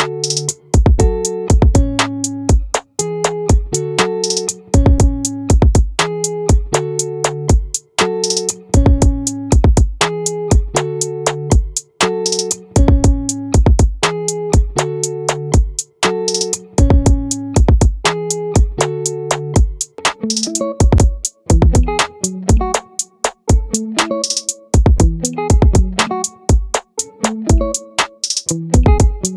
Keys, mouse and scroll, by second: 7.0-9.1 middle drag, 10.8-15.2 drag, 20.2 Tab, 21.4-23.2 drag, 24.8-27.2 right drag, 25.6 click, 27.2 click.